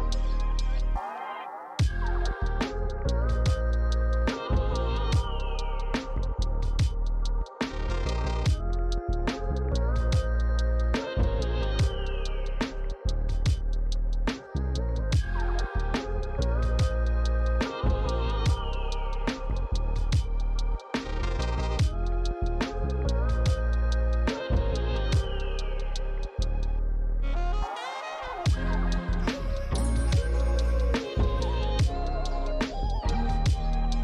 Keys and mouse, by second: 6.8 click, 7.6 click, 8.2 f, 8.3 click, 8.4 f, 9.1 click, 10.2-13.2 typing, 10.2 click, 11.7 click, 11.8 click, 12.2 click, 12.6 click, 12.9 click, 13.2 click, 15.2 f, 15.3 click, 15.9 f, 17.2 click, 17.3 shift+click, 18.0 f, 18.0 click, 18.7 f, 18.8 click, 20.3 shift+click, 21.0 click, 24.5-27.1 typing, 24.6 click, 25.1 click, 26.0 click, 26.6 click, 26.9 click, 31.3 click, 32.1 click.